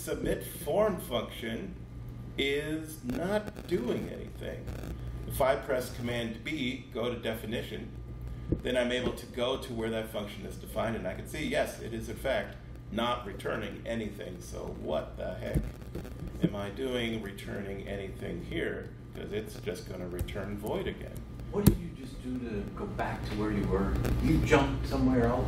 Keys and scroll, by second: 7.9 super+b, 15.4 alt+super+Left, 20.1 BackSpace, 20.8 shift+Right, 21.6 BackSpace.